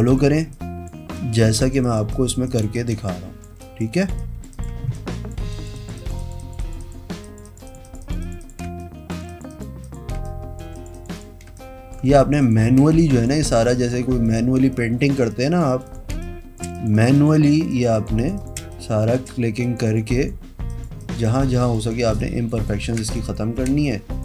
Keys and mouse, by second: 0.4 space, 1.8 click, 1.9 click, 2.3 click, 2.6 click, 2.9 click, 3.1 space, 3.2 click, 4.1 click, 4.3 click, 4.7 click, 4.8 space, 5.1 click, 5.6 click, 5.9 click, 6.1 click, 6.3 click, 6.9 click, 7.4 click, 7.8 click, 8.0 click, 8.4 click, 8.8 space, 9.4 click, 9.6 click, 10.0 click, 10.3 space, 10.4 click, 11.6 space, 12.4 click, 12.5 click, 12.9 space, 13.6 click, 13.8 click, 14.4 click, 14.8 space, 14.8 click, 15.4 click, 15.6 click, 16.3 space, 17.8 click, 18.1 click, 18.3 click, 18.7 space, 18.9 click, 19.7 click, 20.0 click, 20.3 click, 23.0 z, 23.8 space, 24.0 click.